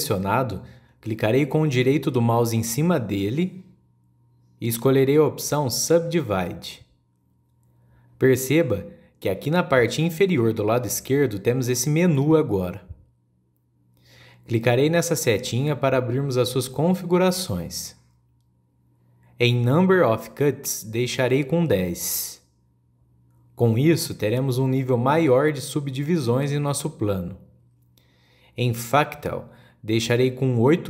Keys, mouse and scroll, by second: 3.8-6.9 right drag, 18.1-21.1 drag, 21.5-24.6 drag, 30.6-30.8 drag.